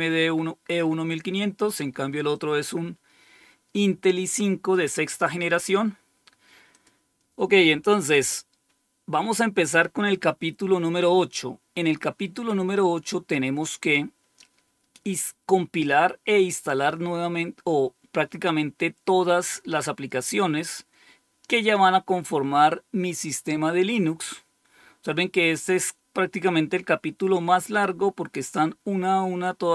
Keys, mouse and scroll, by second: 0.2-0.8 scroll up 4, 2.3-4.7 drag, 5.6-6.6 scroll down 3, 6.6 click, 24.5 scroll down 2, 25.4-27.1 scroll down 3, 27.1-28.3 scroll down 3, 29.0-29.7 scroll down 2.